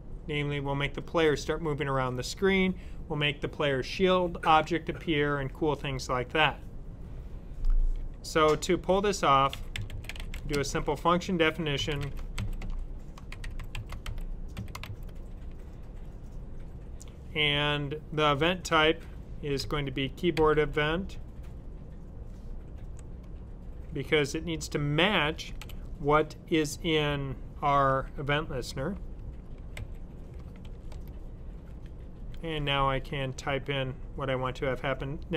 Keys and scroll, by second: 9.3-14.7 typing, 19.2-20.9 typing, 25.5 typing, 29.0-30.5 typing.